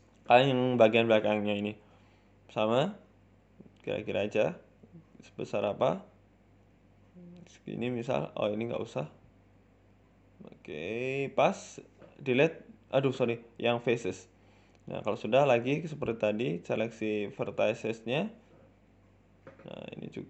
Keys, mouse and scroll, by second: 2.4 click, 2.6 scroll up 2, 7.3 middle click, 8.1 c, 8.7 middle click, 11.3 Delete, 12.4 middle click, 12.8 ctrl+z, 13.1 Delete, 13.8 middle click, 14.3-14.8 scroll up 2, 15.2 click, 16.1 click, 16.6 right click, 16.8 shift+right click, 17.4 middle click, 18.0 shift+right click, 18.5 middle click, 18.9 shift+middle click, 18.9 f, 19.6 middle click, 20.1 right click.